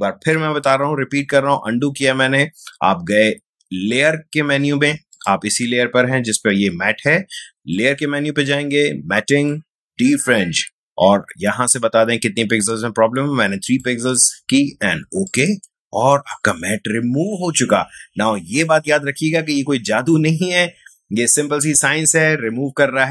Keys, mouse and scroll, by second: 0.1 ctrl+z, 3.9 click, 7.7 click, 11.7-13.7 scroll up 1, 13.7 click, 16.1 ctrl+space, 16.3-18.0 ctrl+drag.